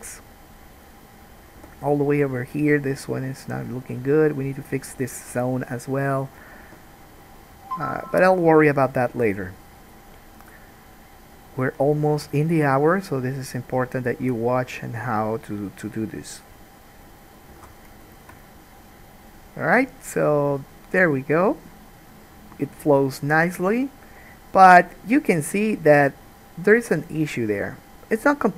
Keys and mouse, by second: 1.8 g, 6.4 click, 6.8 g, 9.0 click, 9.3 g, 13.7 click, 14.4 g, 17.7 alt+a, 17.8-28.5 shift+middle drag.